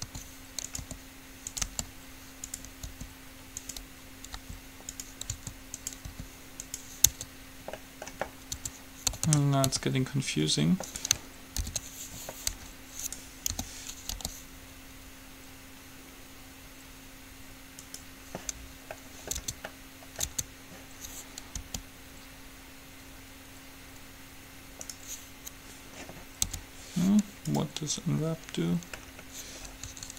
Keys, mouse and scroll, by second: 0.2 s, 0.9 r, 1.9 g, 3.2 r, 4.6 g, 5.5 s, 6.2-8.1 drag, 6.2 r, 7.3 Tab, 8.7 Tab, 9.5 a, 9.9 a, 11.2-12.2 right drag, 12.2 ctrl+l, 12.7 g, 13.7 o, 14.2 g, 19.2-21.0 middle drag, 19.6 Tab, 20.5 Tab, 21.8 g, 26.7 u, 29.2-30.1 middle drag.